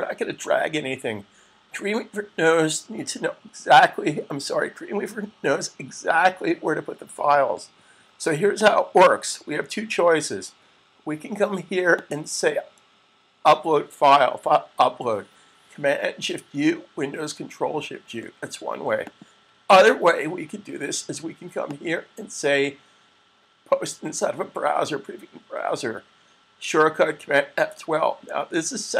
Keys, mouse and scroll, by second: 8.5 click, 12.0 click, 18.8 click, 22.0 click.